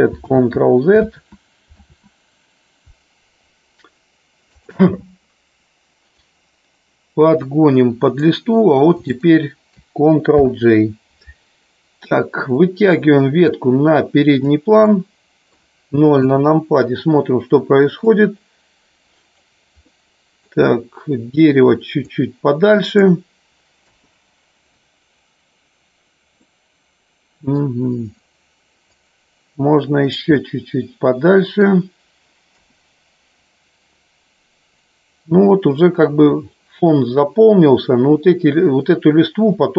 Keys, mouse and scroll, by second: 0.4 ctrl+z, 1.1 ctrl+z, 1.8 ctrl+z, 6.0-8.1 drag, 9.0 shift+click, 10.4 ctrl+j, 12.5-14.4 drag, 14.9-15.5 middle drag, 16.3 KP_0, 18.2-19.4 drag, 19.9 middle click, 22.0 click, 23.8 KP_0, 26.4-27.5 middle drag, 28.9-30.3 drag, 30.4-31.6 middle drag, 31.6 scroll down 1, 32.4 KP_0.